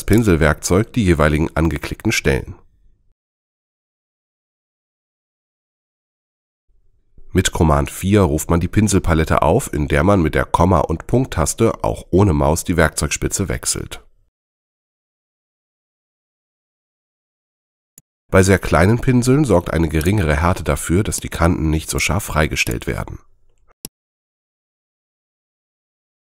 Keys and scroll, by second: 7.1 super+4, 12.1 ,, 13.4 ., 14.7 ,, 16.4 ,.